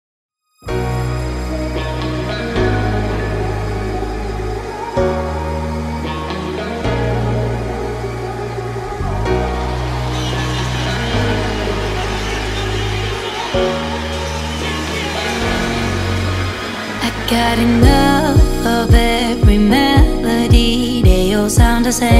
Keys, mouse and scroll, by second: 0.6 2, 1.2 shift+', 1.4 Return, 1.7 space, 2.0 click, 2.4 scroll up 1, 3.7 click, 4.6 p, 4.7 click, 5.1 space, 5.2 click, 6.7 shift+click, 7.1-7.4 scroll up 1, 7.9 m, 8.2 click, 9.2 1, 9.7 shift+', 9.9 Return, 10.2 space, 10.4 scroll down 1, 10.8 click, 11.1 scroll down 1, 12.4 middle click, 13.0-13.8 scroll down 1, 13.8 middle click, 14.3 scroll down 1, 14.8 click, 15.9-16.3 scroll up 1, 17.7 m, 18.3 click, 19.2 Left, 19.8 shift+middle click, 20.4-20.8 scroll down 1.